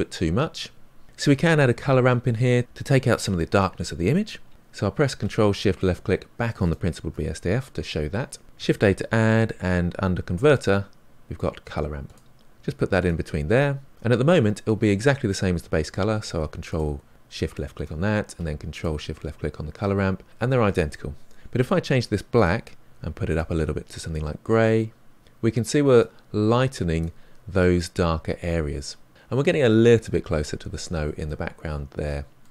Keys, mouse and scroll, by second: 6.7 ctrl+shift+click, 16.7 ctrl+shift+click, 18.7 ctrl+shift+click, 23.3 click, 31.3-32.5 middle drag.